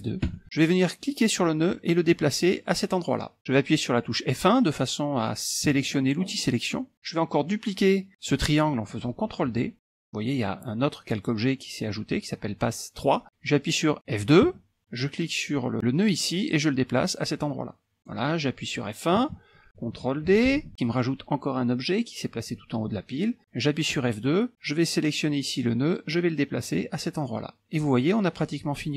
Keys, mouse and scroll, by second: 0.4 F2, 1.5-3.4 drag, 3.4-3.7 scroll down 1, 5.7 F1, 10.0 ctrl+d, 14.6 F2, 16.1-18.5 drag, 19.3 F1, 20.6 ctrl+d, 24.1 F2, 25.7-28.2 drag.